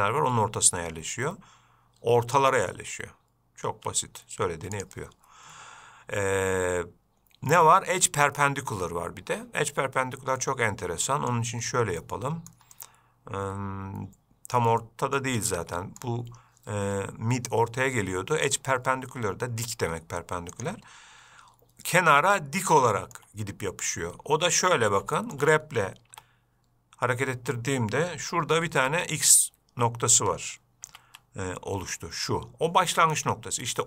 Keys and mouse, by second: 5.0-9.9 drag, 10.7-11.6 middle drag, 12.3-12.8 middle drag, 13.1-14.8 middle drag, 15.1 middle click, 15.7-16.3 middle drag, 18.7-21.7 drag, 23.1-23.4 shift+middle drag, 24.2-24.8 middle drag, 25.5 shift+middle click, 26.4 g.